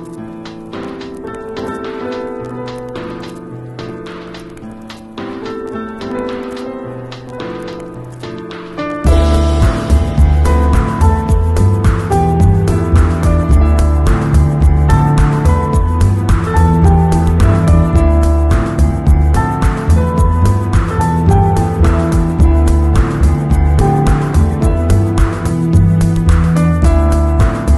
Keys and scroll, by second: 6.1 shift+Return, 6.6 Return, 11.4 Down, 14.6 super+t, 15.2 shift+super+t, 16.7 shift+Return, 17.2 Up, 17.4 z, 20.9 super+[, 22.7 b.